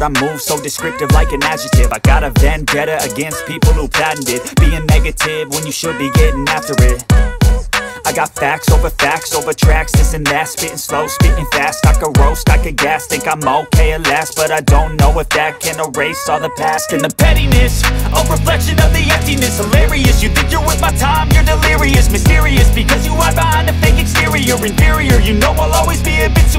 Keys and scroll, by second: 3.1 space, 4.0 shift+Page_Down, 4.6 space, 12.8 Escape, 15.3 shift+Page_Up, 18.4 F2.